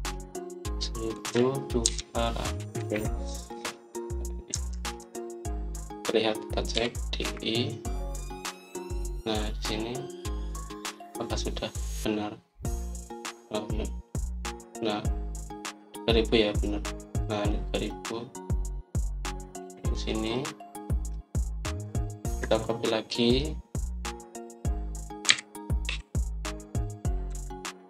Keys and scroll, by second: 0.0-0.5 typing, 1.9-3.7 typing, 4.4 Return, 5.4 Escape, 5.9 Escape, 5.9 typing, 7.4-8.1 typing, 22.6 Escape, 23.2 Escape, 26.2-27.2 typing.